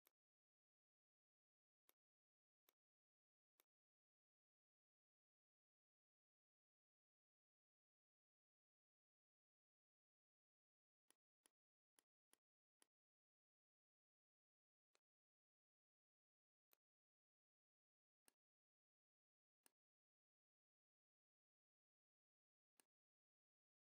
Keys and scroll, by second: 7.8 ctrl+d.